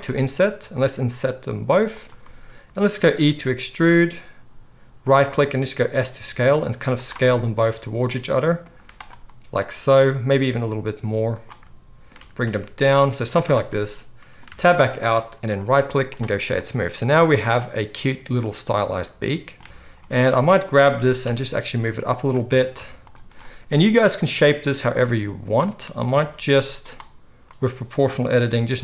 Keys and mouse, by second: 0.1 i, 3.2 e, 5.5 s, 8.7 z, 10.2 s, 12.1 g, 13.2 z, 14.5 Tab, 15.5-17.3 right drag, 17.3-20.0 middle drag, 19.6 KP_3, 19.6 KP_1, 20.0 right drag, 20.3 middle click, 20.4-24.2 right drag, 20.9 g, 22.4 Tab, 22.7 z, 24.2-26.9 middle drag, 25.9-27.5 drag, 25.9-26.9 right drag, 26.1 s, 27.5-28.8 middle drag, 28.1 s.